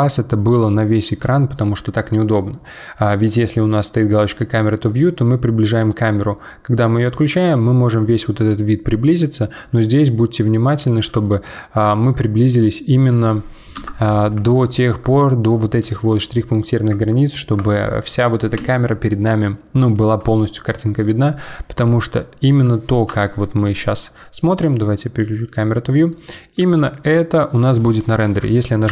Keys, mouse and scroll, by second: 0.2-0.6 scroll up 1, 0.6-3.7 shift+middle drag, 3.9 click, 4.4 scroll down 1, 4.7 scroll up 2, 5.0 scroll down 2, 5.2 scroll up 2, 5.4 scroll down 2, 5.7 scroll up 2, 6.0-6.5 scroll down 1, 7.0 click, 7.5 scroll down 1, 7.7-9.0 scroll up 7, 9.3 scroll down 3, 10.6 scroll up 2, 11.2-13.7 shift+middle drag, 13.7 KP_0, 14.6-20.1 shift+middle drag, 22.1 middle click, 23.1 KP_0, 24.6 click, 25.4 click, 26.1-28.9 middle drag.